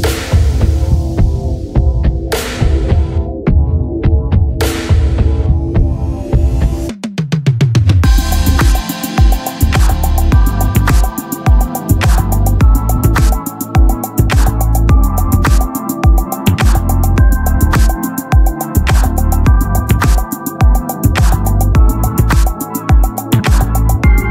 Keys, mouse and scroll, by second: 0.3-2.3 drag, 2.8-4.2 drag, 10.7-11.9 drag, 14.4 Tab, 17.2-23.7 right drag, 23.6 ctrl+b.